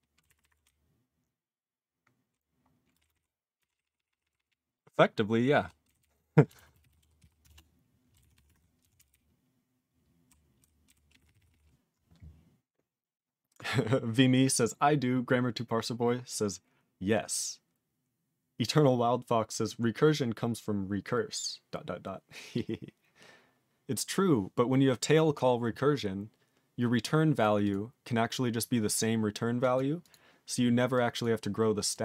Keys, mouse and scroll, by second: 0.2 ctrl+=, 0.6-2.3 ctrl+n, 2.9 ctrl+space, 3.0 ctrl+e, 3.0 ctrl+n, 3.1 ctrl+n, 3.6 ctrl+g, 3.7 ctrl+p, 3.8 ctrl+p, 3.9 ctrl+p, 4.1 ctrl+p, 4.2 ctrl+p, 4.3 ctrl+p, 4.4-5.6 ctrl+p, 5.8 ctrl+n, 6.0 ctrl+n, 6.1 ctrl+n, 7.5 ctrl+Return, 8.2 ctrl+=, 8.8 ctrl+a, 9.0 ctrl+n, 9.1-10.3 ctrl+n, 10.6 ctrl+n, 10.8 ctrl+n, 11.1 ctrl+p, 11.2 ctrl+e, 11.3 ctrl+p, 11.5 ctrl+p, 16.1-17.2 scroll up 1, 17.2-21.1 scroll up 2, 22.4 scroll up 3, 23.6 scroll down 8, 27.0 click, 27.4 click, 27.6 click, 27.7 click, 28.6 click, 28.9 click, 29.6 click, 29.7 click, 30.0 click, 30.1 click, 30.9 click, 31.2 click, 31.9 click.